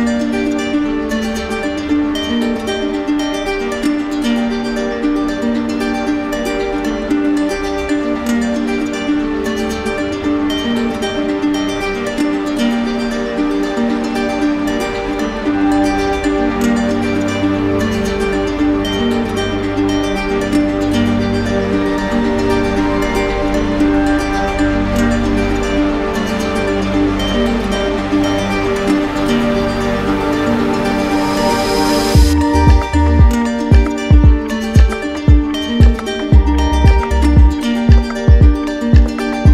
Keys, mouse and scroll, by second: 0.5 click, 2.0 click, 2.9 click, 4.1 click, 5.2 right click, 5.7 alt+right click, 6.6 click, 7.3 click, 7.9 click, 9.1 right click, 9.6 alt+right click, 10.5 alt+click, 11.5 right click, 12.3 click, 13.1 click, 13.7 click, 14.1 shift+click, 14.9 alt+right click, 17.3 right click, 18.0 right click, 19.1 right click, 19.3 alt+click, 20.5 click, 21.0 click, 22.8 click, 23.7 right click, 24.5 alt+right click, 26.4 right click, 27.3 shift+right click, 28.3 alt+click, 29.0 alt+right click, 29.8 right click, 32.1-33.2 drag, 33.3-34.3 drag, 35.6 click, 36.3 click, 37.4 alt+click, 39.2 click.